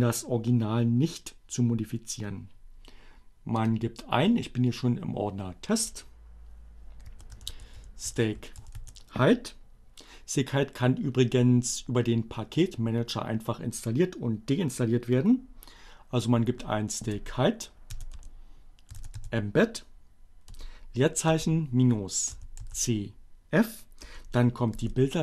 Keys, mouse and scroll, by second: 3.3 click, 6.9-8.6 typing, 15.4 space, 17.7-20.8 typing, 22.7 e, 22.9 space, 24.6-25.2 typing.